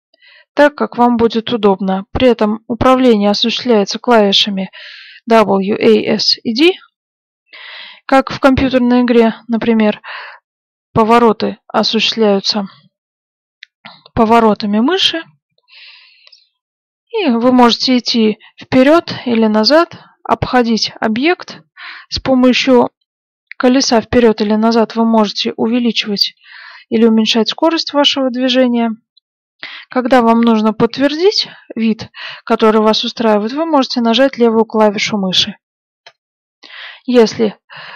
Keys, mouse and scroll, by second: 37.7 shift+f.